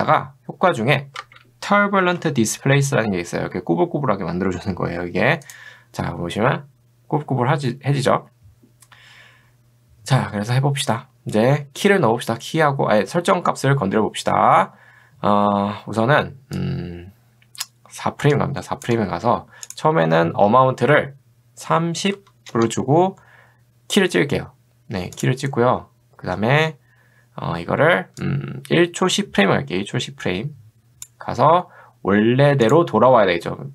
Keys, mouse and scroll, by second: 1.2 ctrl+space, 1.9-2.7 typing, 5.5 click, 16.6-18.9 drag, 22.2 0, 22.5 Return, 25.2 click, 28.2-31.1 drag, 32.7 click.